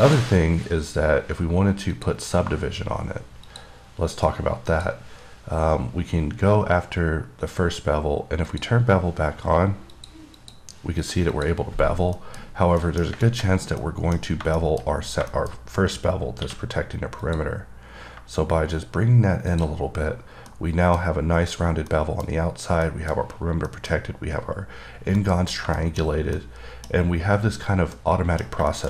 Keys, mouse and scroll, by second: 0.3 click, 2.2 click, 3.8 click, 5.0 click, 8.7 click, 8.9 click, 10.2 click, 10.6 click, 11.3 click, 11.6 double click, 12.5 middle click, 12.7 scroll up 3, 13.1 middle click, 13.5 middle click, 13.8 scroll up 3, 14.1 middle click, 14.1-14.7 scroll down 2, 14.9 middle click, 15.1-15.5 scroll up 3, 15.6 middle click, 15.8 scroll up 2, 17.5 click, 19.8 click, 20.1-20.7 scroll down 5, 20.7 middle click, 21.8-22.2 scroll down 3, 22.2 middle click, 22.6 scroll up 1, 23.1 middle click, 23.9 middle click, 25.2 scroll down 2, 25.5 middle click, 26.1 middle click, 26.6 middle click, 27.8-28.2 scroll down 1, 28.2 middle click.